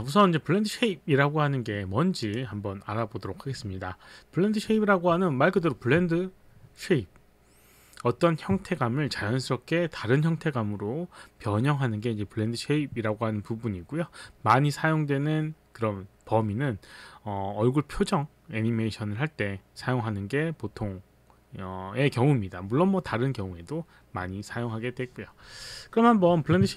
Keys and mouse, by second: 2.2 click.